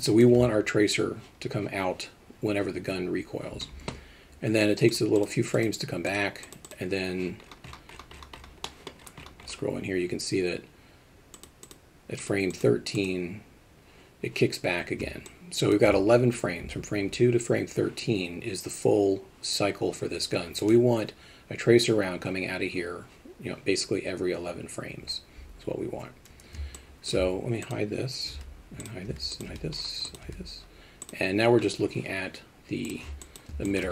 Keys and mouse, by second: 5.2-6.5 drag, 6.6 click, 8.8 middle click, 11.4 click, 11.6 click, 12.6 click, 15.3-15.7 alt+shift+middle drag, 26.8-27.1 alt+shift+middle drag, 27.6 click, 28.3 h, 29.3 click, 30.1 click, 31.0 click, 32.9 click, 33.2 alt+middle click, 33.7 alt+shift+middle drag.